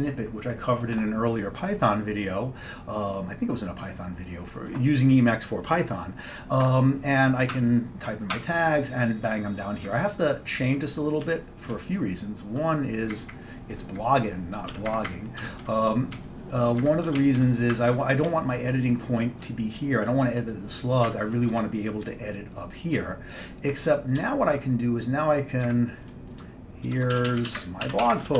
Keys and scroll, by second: 7.6 shift+Tab, 8.4 Tab, 9.9 Up, 10.4 Up, 10.6 Up, 11.3 Delete, 11.8 Down, 12.3 Down, 13.2 Up, 13.9 Up, 14.6 Left, 14.9 Up, 15.5 g, 15.7 Down, 16.2 Down, 16.9 Up, 17.0-19.4 typing, 18.0 Up, 18.3-19.4 Left, 21.1 Up, 21.1-21.6 typing, 21.6 Right, 22.8-24.3 typing, 25.7-28.3 typing.